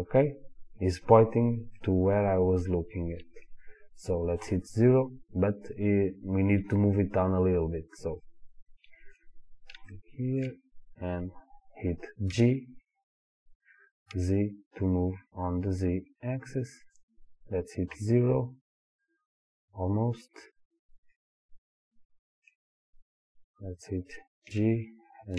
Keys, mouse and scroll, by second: 1.8-4.5 middle drag, 4.5 KP_0, 4.7-5.9 middle drag, 8.2-8.8 middle drag, 8.9-18.0 middle drag, 9.5-10.0 scroll down 2, 12.3 g, 16.4 click, 18.0 KP_0, 21.2-25.3 middle drag, 22.7-24.5 scroll down 2, 24.5 g.